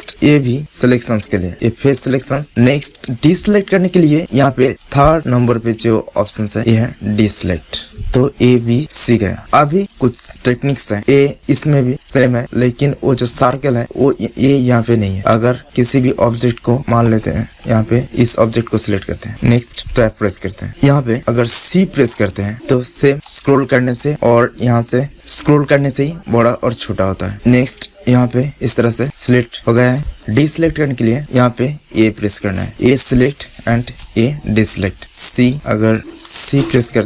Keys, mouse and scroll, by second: 4.6-6.1 drag, 6.5-8.0 drag, 8.0-9.3 right drag, 9.5 Tab, 10.2 middle click, 10.6 Tab, 12.5-15.3 middle drag, 15.3 Tab, 16.6 right click, 17.4 Tab, 19.2 middle click, 19.4 click, 19.7 Tab, 29.4 right click, 31.8 right click, 31.9 a, 32.6 a, 34.0 a, 34.9 a, 36.4 c.